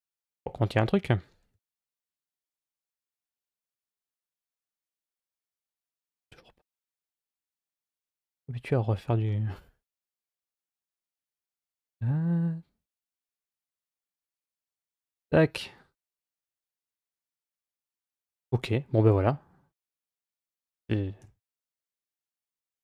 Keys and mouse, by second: 0.1 middle click, 1.3 g, 8.0-9.1 middle drag, 10.3 g, 15.4-18.2 middle drag, 20.1 a, 21.0 g.